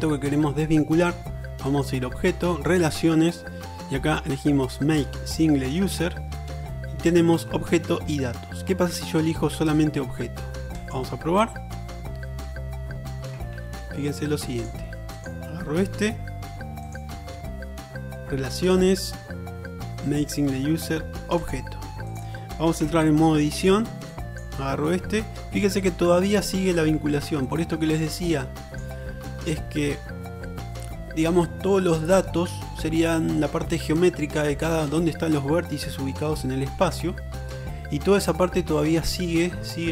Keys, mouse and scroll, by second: 13.4-16.7 ctrl+drag, 13.6 ctrl+z, 22.2 click, 22.4 middle click, 22.9 Tab, 23.2-24.6 drag.